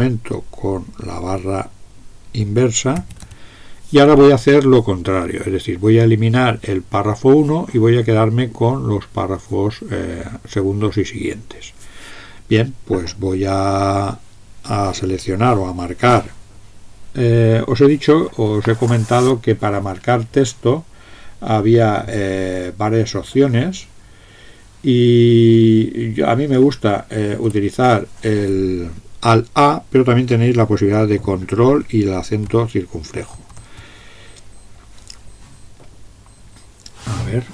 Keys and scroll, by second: 3.0 alt+\, 33.3 ctrl+^.